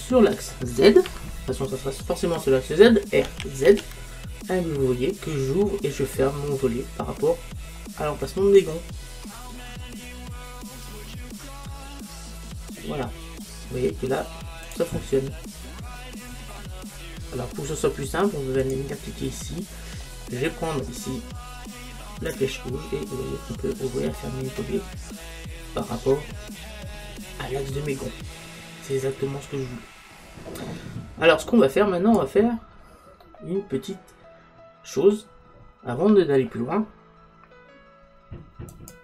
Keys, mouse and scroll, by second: 3.3 r, 14.8 click, 16.0-18.7 middle drag, 18.7 click, 20.1-22.0 middle drag, 22.3 click, 32.7-35.2 middle drag, 35.5-38.8 middle drag, 38.8 click.